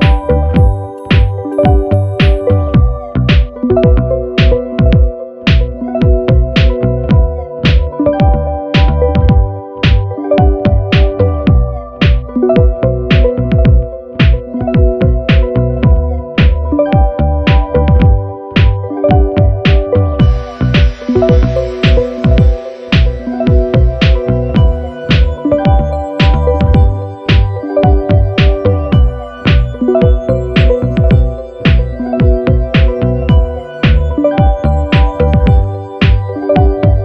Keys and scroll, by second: 1.0-1.9 typing, 8.4-9.2 typing, 16.3 super+-, 31.2 Down, 31.8 shift+Down.